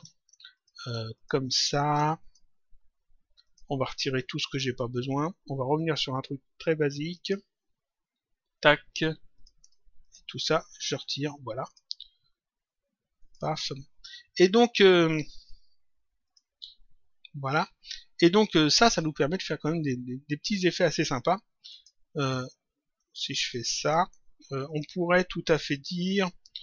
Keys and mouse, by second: 0.4 click, 1.0 ctrl+click, 2.2 click, 3.4 click, 7.1 shift+click, 8.2 Delete, 9.3 click, 10.0 shift+click, 10.8 Delete, 11.5 click, 13.1 click, 16.2 click, 16.5 s, 19.6 click, 21.6 click, 24.6 click.